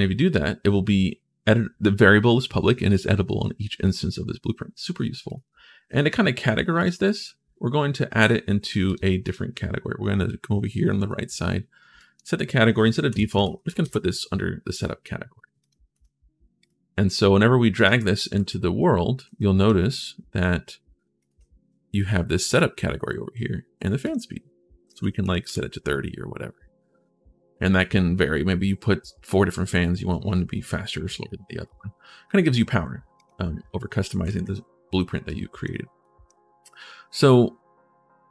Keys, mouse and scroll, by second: 5.1 click, 6.6 click, 6.8 click, 8.6 click, 9.0 click, 11.8 click, 12.7-13.7 typing, 15.4 click, 15.7 click, 16.3 click, 17.5 click, 18.1 ctrl+shift+s, 18.6 right click, 18.7-19.5 typing, 20.9 click, 23.8 click, 24.6 3, 32.9 click, 34.0 ctrl+shift+s, 35.1 right click, 35.8 right click.